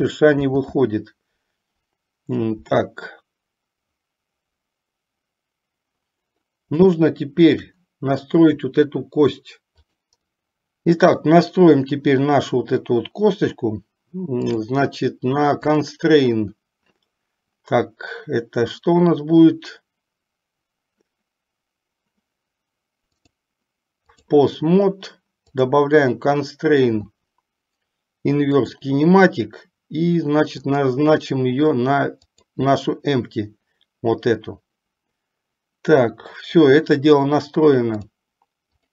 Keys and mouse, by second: 0.6 ctrl+z, 7.1-7.9 shift+middle drag, 9.9 click, 10.2 click, 14.6 click, 15.8 click, 23.4-24.6 drag, 25.6-29.0 drag, 30.9 click, 38.1-38.9 drag.